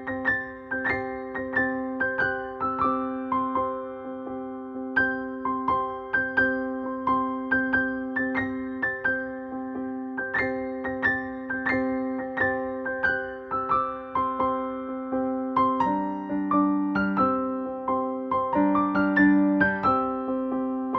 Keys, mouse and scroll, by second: 3.2 shift+Up, 6.4-8.7 drag, 14.6 9, 16.1 Return, 18.1 click, 20.6 click.